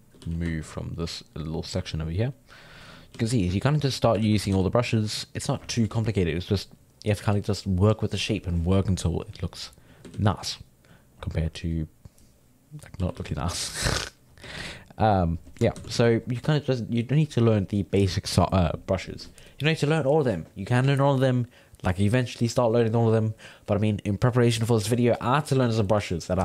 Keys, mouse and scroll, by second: 0.2 f, 0.6-3.1 ctrl+drag, 3.1 f, 3.6 click, 4.2 ctrl+z, 4.5 f, 4.9-8.1 drag, 9.4 click, 10.1 ctrl+z, 10.5-13.0 drag, 13.0 g, 13.2 f, 13.5 f, 13.9 click, 14.4 f, 15.8 shift+c, 16.0 f.